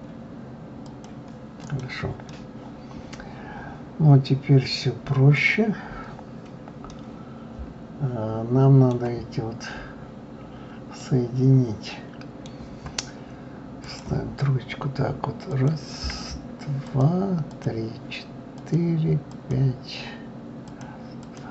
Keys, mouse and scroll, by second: 1.6 click, 2.3-5.2 middle drag, 6.9-9.4 middle drag, 9.4-10.0 scroll down 3, 10.0-10.7 scroll up 2, 10.7-11.0 scroll up 2, 11.0-13.8 middle drag, 13.8-15.6 drag, 16.8 shift+click, 17.5 shift+click, 18.6 shift+click, 19.3 shift+click, 20.6 shift+click, 21.2 shift+click.